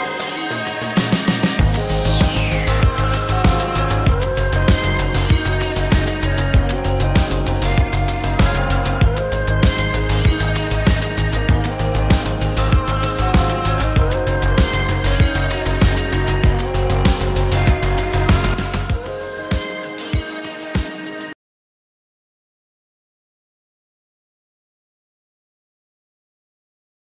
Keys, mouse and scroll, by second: 2.2 Delete, 4.4 Delete, 5.9 Delete, 6.9 Delete, 8.3 Delete, 9.8 -.